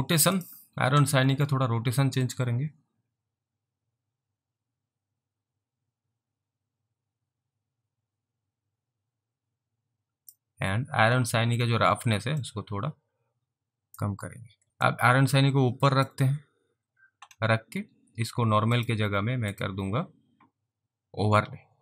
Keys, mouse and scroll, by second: 1.6 click, 2.3 click, 12.6 click, 14.7 alt+click, 14.9 click, 18.8 click.